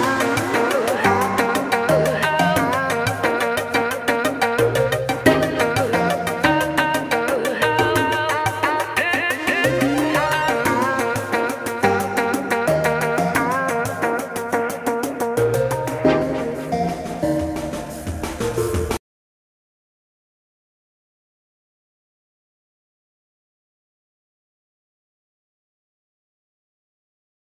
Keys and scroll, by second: 2.6 ctrl+b, 11.6 f, 13.5-15.5 ctrl+space.